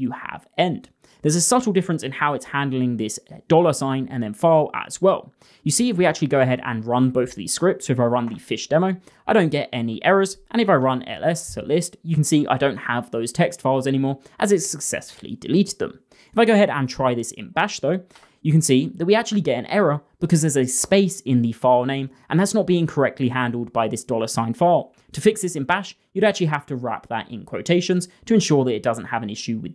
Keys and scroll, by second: 2.2-3.1 typing.